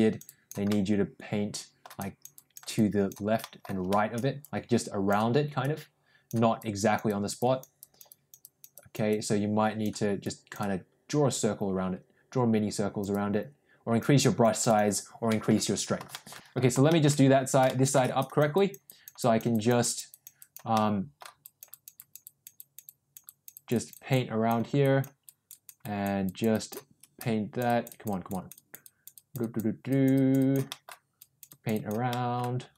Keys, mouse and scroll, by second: 0.2 click, 0.7-1.8 middle drag, 1.9 click, 2.3 click, 2.7 click, 3.4 middle click, 4.3 click, 5.5 click, 6.6 click, 7.0 click, 7.3 click, 7.8 click, 8.0 click, 8.4 click, 8.7 click, 9.1 click, 10.2-13.0 drag, 13.1 click, 14.2 click, 14.6 click, 15.2 middle click, 16.0 shift+middle click, 16.4 ctrl+z, 16.4 middle click, 16.8 middle click, 17.6 middle click, 18.1 click, 18.4 click, 18.7 click, 19.1 click, 19.4 click, 19.7 click, 20.0 click, 20.3 click, 20.6 middle click, 21.3 click, 21.6 click, 21.8 click, 22.1 click, 22.4 click, 22.7 click, 23.1 click, 24.7 click, 25.1 click, 25.7 click, 26.1 click, 26.4 click, 27.0-28.7 drag, 28.7 click, 29.0 click, 29.8 click, 30.6 middle click, 31.1 click, 32.0 middle click.